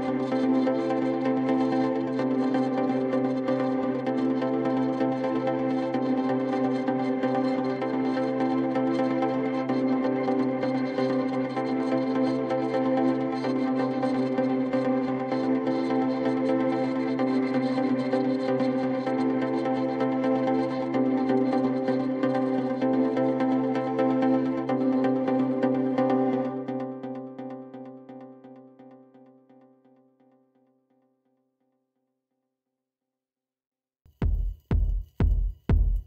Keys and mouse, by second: 2.8-4.1 drag, 14.8-16.2 drag, 20.7 click, 23.2-24.6 drag, 26.9-28.4 right drag, 30.2-31.7 alt+drag, 31.8 alt+click, 34.8 click, 35.9-36.0 alt+drag.